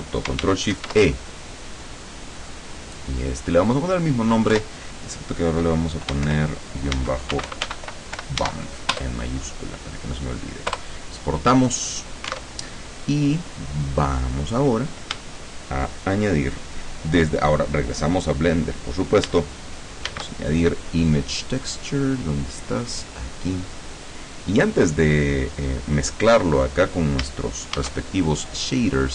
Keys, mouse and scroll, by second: 0.8 ctrl+shift+e, 3.3 click, 4.6 BackSpace, 6.4 shift+-, 7.0 Caps_Lock, 7.4 b, 7.6 u, 7.8 m, 8.3 p, 8.5 Caps_Lock, 9.0 Return, 10.8 Return, 12.4 alt+Tab, 20.2 shift+a, 22.9 click, 24.1 click, 27.8 shift+a.